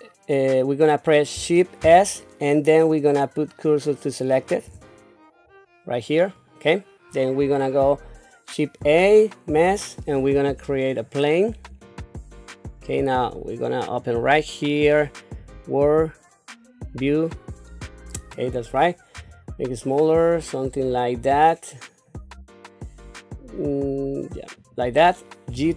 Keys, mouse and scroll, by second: 1.8 shift+s, 8.8 shift+a, 14.0 click, 15.4-17.1 drag, 19.4 s, 25.5 g.